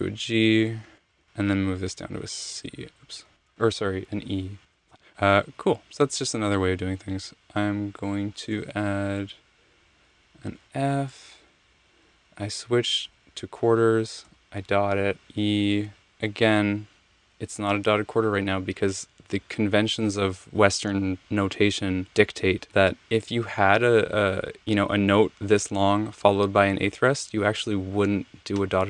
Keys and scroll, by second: 0.1 alt+Up, 0.6 alt+Up, 0.8 alt+Up, 1.1 Right, 1.8-2.5 Down, 3.3 alt+Down, 3.3 alt+Down, 3.8 alt+Down, 4.3 alt+Down, 5.4 Right, 7.3 Return, 9.0 7, 10.8 f, 13.0 6, 14.2 ., 15.2 e.